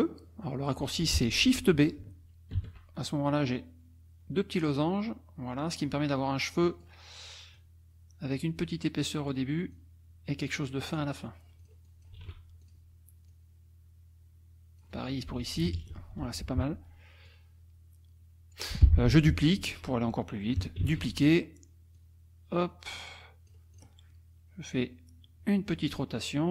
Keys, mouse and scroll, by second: 2.6 shift+b, 3.3-6.0 drag, 6.6 click, 7.6 click, 9.0 click, 9.7-11.1 drag, 11.6 click, 12.2 shift+b, 12.6 shift+click, 13.3-15.0 drag, 15.4 F1, 15.6 KP_Subtract, 16.1 F2, 17.3-18.7 drag, 18.8 F1, 20.8 ctrl+d, 22.0-23.7 drag, 23.8 click, 25.7-26.5 drag.